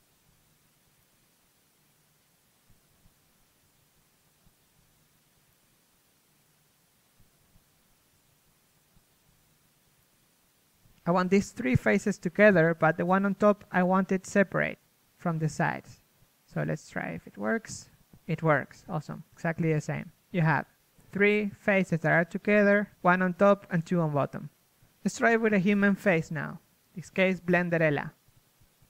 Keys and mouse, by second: 0.8 right click, 1.6 ctrl+e, 2.0 a, 3.7 z, 12.7 z, 14.0 z, 16.4 a, 18.2 u, 25.0 a, 25.6 a, 26.8 Tab.